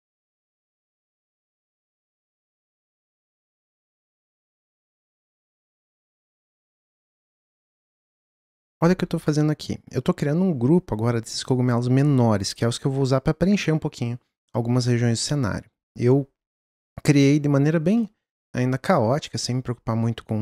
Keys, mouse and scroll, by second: 0.2 click, 0.5 alt+d, 1.7 alt+d, 2.4 click, 3.1 alt+d, 4.1 click, 4.5 alt+d, 5.5 alt+d, 7.8 ctrl+click, 18.0-18.5 middle drag, 18.5-19.1 scroll up 1, 19.1-20.4 scroll up 1.